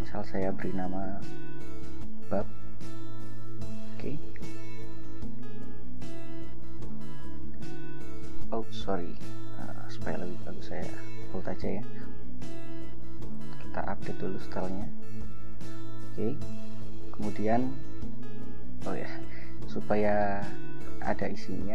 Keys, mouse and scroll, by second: 0.4-3.6 typing, 2.3 shift+Caps_Lock, 5.2 click, 7.3 click, 8.9 click, 10.9 ctrl+b, 13.4 click, 14.4 click, 15.4 click, 18.5 Return, 19.5 Return, 21.1 ctrl+j.